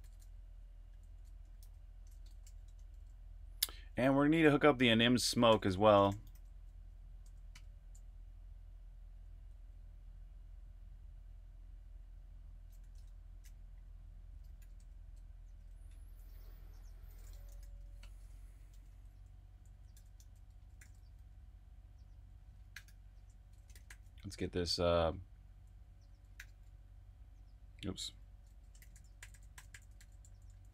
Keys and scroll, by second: 0.0-2.6 typing, 5.2-7.5 typing, 9.3-10.1 typing, 11.6 typing, 12.9 super+`, 14.3-19.6 typing, 22.5-26.3 typing, 28.5-30.7 typing.